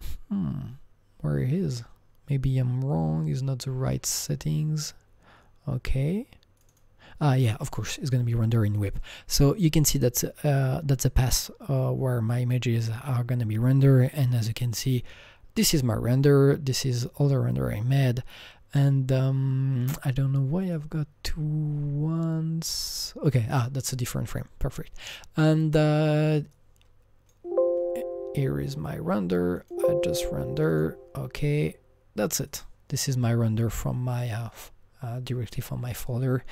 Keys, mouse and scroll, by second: 6.6-9.3 drag, 6.6 scroll up 1, 20.6-23.3 drag, 26.5-29.6 drag, 30.7-32.5 drag, 32.5-36.3 drag.